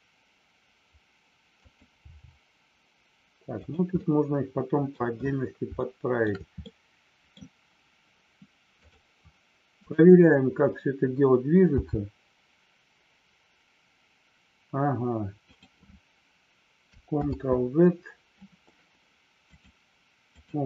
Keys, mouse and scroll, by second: 3.6 click, 3.8-4.8 middle drag, 5.7 shift+middle click, 6.6 scroll up 1, 6.7 middle click, 7.2 scroll down 1, 8.7 click, 9.8 click, 17.2 ctrl+z, 19.4-20.5 drag.